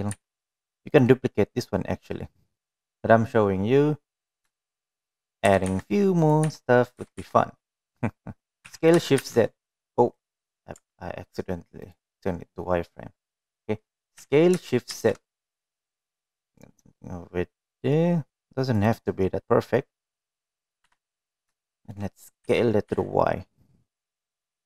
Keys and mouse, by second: 0.6 s, 1.2 s, 3.2 middle click, 5.6 middle drag, 6.5 g, 7.5 s, 8.0 g, 10.3 shift+z, 11.4 right drag, 11.8 Tab, 12.9 click, 15.2 s, 21.1 middle click, 22.0 KP_7, 22.8 shift+middle click, 23.5 s.